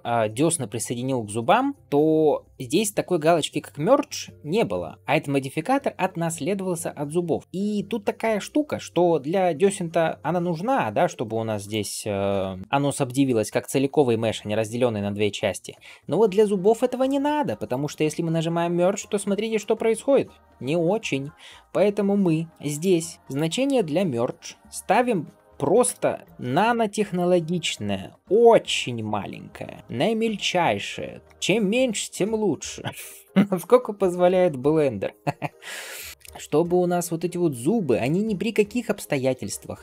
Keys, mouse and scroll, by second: 7.4 click, 9.4-9.8 scroll up 2, 11.6 click, 16.2 scroll up 1, 17.7 click, 18.2-19.0 scroll down 1, 20.3 scroll up 2, 21.4-21.8 scroll down 2, 22.6-36.0 drag, 26.0 KP_0, 26.3 KP_0, 36.0 shift+middle click, 36.1 scroll up 4, 36.2 alt+z, 36.5-38.1 middle drag, 38.1-38.8 scroll up 2, 38.8-39.4 scroll down 2, 39.4-39.8 scroll down 2.